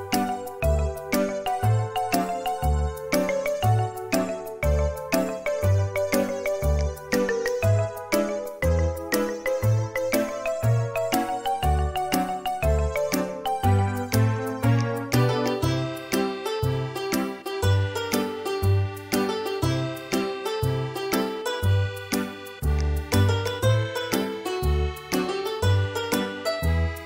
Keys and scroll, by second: 16.3 Delete.